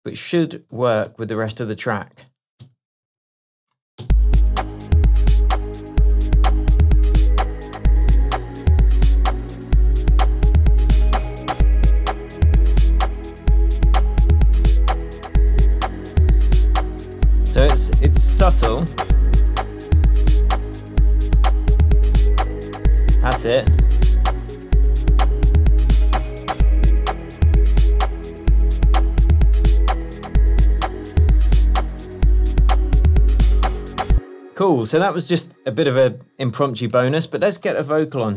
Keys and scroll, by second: 2.1 shift+super+d, 2.3 shift+super+Tab, 3.1 space, 13.2 super+a, 14.0 shift+super+a, 15.0 shift+Down, 18.6 shift+Tab, 34.2 space, 34.7 super+s, 37.0 super+t, 38.2 super+r.